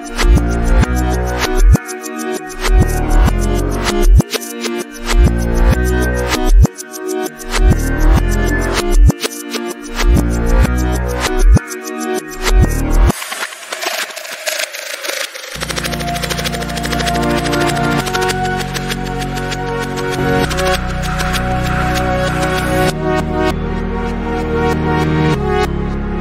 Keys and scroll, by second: 2.0 Up.